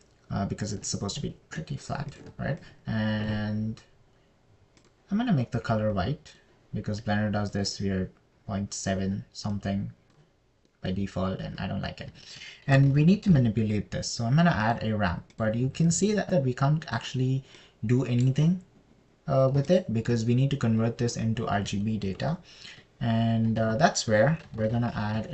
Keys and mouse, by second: 3.7 ctrl+shift+click, 4.1 click, 6.2 click, 10.9 click, 13.7 shift+a, 17.1 drag, 23.6 a, 25.0 shift+a.